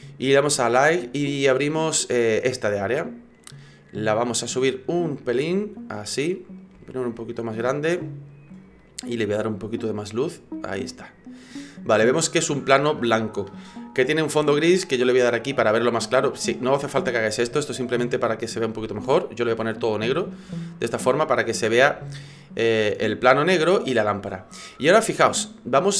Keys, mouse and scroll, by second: 4.2 click, 5.3 click, 6.8 s, 8.8 click, 9.8 click, 14.9 click, 15.9 click, 20.7 click, 22.7 right click.